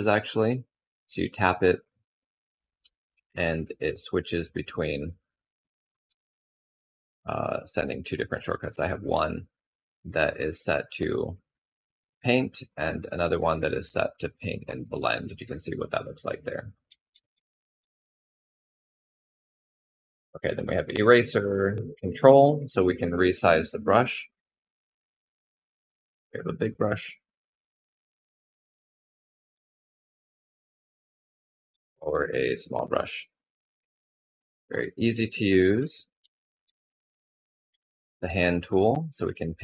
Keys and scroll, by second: 0.8 typing, 2.3-3.3 typing, 5.6 typing, 9.0 typing, 12.6 typing, 26.7 typing, 34.8-36.4 typing.